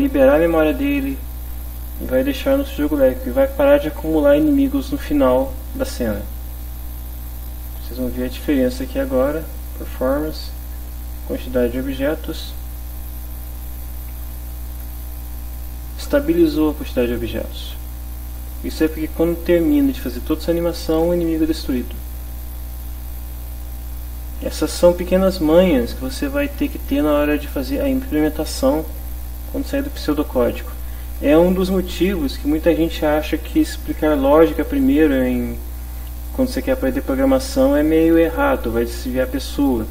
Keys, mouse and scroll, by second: 7.2 click, 9.2 click, 9.7 click, 12.6 click.